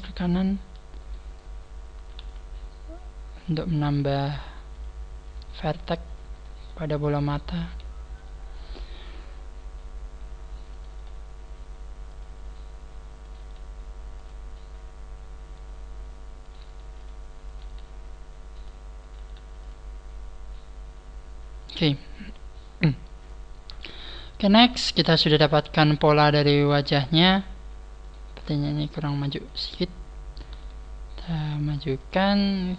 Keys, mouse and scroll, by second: 1.4 scroll down 3, 2.2 g, 3.6 click, 3.8 right click, 4.0 g, 4.8 click, 5.2 right click, 5.4 g, 6.4 right click, 6.5 g, 7.5 right click, 7.6 g, 8.2 click, 8.6 scroll down 4, 9.4-9.8 scroll up 3, 10.2 scroll up 2, 10.7 right click, 13.3 right click, 13.4 g, 15.4 scroll up 1, 16.0 scroll up 1, 16.4 right click, 16.6 g, 17.0 click, 17.4 right click, 17.6 g, 18.8 click, 19.0 right click, 19.2 g, 19.6 click, 20.3 scroll down 4, 21.9-22.4 scroll down 1, 22.6 scroll down 1, 23.6 scroll down 5, 25.1 scroll up 5, 25.2 scroll down 2, 27.5 scroll up 1, 28.0 right click, 28.0-28.4 scroll up 2, 29.0 shift+right click, 29.6-30.4 scroll up 4, 30.4 g, 32.4 click.